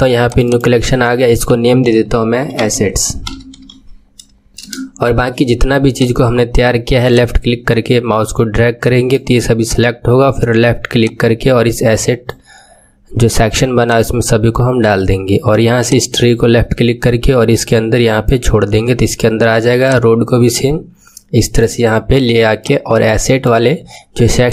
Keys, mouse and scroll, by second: 0.2-2.5 drag, 2.5 s, 5.8-10.1 drag, 10.9-18.8 drag, 19.8-24.5 drag.